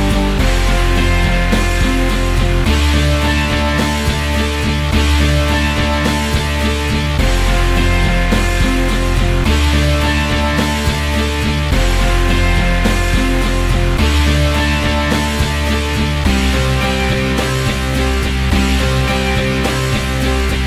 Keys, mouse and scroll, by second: 0.8 middle click, 1.0 r, 1.1 g, 1.3 alt+click, 1.4 alt+middle click, 1.6-2.9 alt+drag, 3.0 q, 3.4 g, 5.6 alt+middle click, 5.8 shift+d, 6.0 r, 6.5 click, 7.0 middle click, 7.2 g, 7.6 alt+click, 8.1 alt+middle click, 8.2-8.9 scroll down 4, 8.4-9.4 drag, 9.5 alt+click, 9.6-10.6 scroll up 3, 9.7 alt+click, 10.3-12.1 drag, 12.1-13.1 middle drag, 13.7 middle click, 14.6-16.0 drag, 17.0 click, 17.6 r, 18.8 click, 19.5 s.